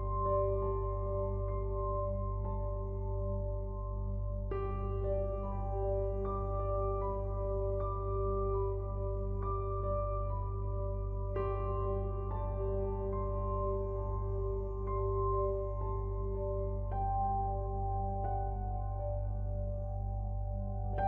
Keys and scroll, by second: 9.3 ctrl+u.